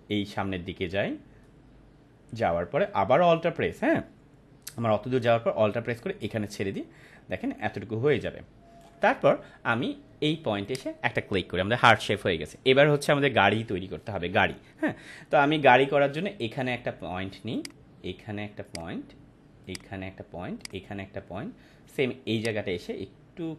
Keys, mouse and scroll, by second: 10.6 click, 17.5-23.5 drag.